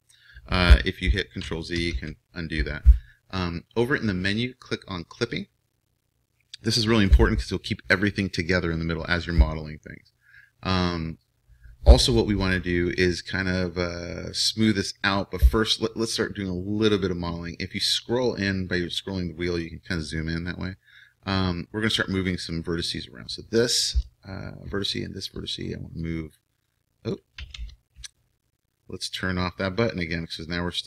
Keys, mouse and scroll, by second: 1.8 ctrl+z, 22.4-27.1 right drag, 26.0-27.9 drag, 27.5 ctrl+z.